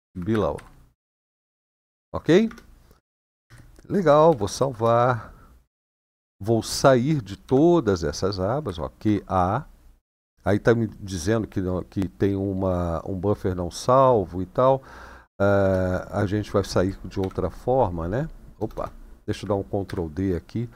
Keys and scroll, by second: 0.0-0.3 typing, 1.9-4.5 typing, 7.2 typing, 8.4-8.8 typing, 9.8 Return, 15.4 Return, 16.9 :, 18.5 BackSpace, 19.6 ctrl+d.